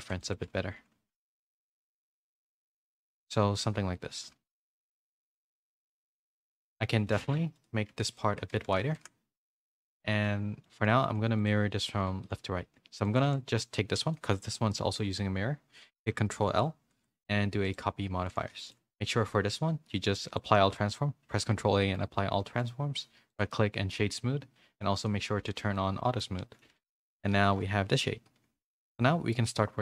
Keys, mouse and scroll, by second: 0.4 s, 5.1 z, 5.4 middle click, 6.4 middle click, 7.1 middle click, 7.9 Tab, 8.1 click, 8.5 Tab, 8.5 a, 8.8 s, 9.6 Tab, 9.9 a, 10.2 middle click, 10.2 a, 10.9 a, 11.3 click, 11.3 a, 12.2 shift+middle click, 13.0 shift+click, 14.1 middle click, 14.7 shift+middle click, 16.8 ctrl+l, 18.2 a, 18.5 a, 18.6 shift+middle click, 19.0 click, 19.4 ctrl+a, 21.8 shift+middle click, 22.0 scroll down 1, 24.9 click, 25.4 a, 25.7 middle click, 25.7 a, 26.8 a, 26.8 a, 27.4 KP_3, 28.2 z, 28.8 shift+middle click.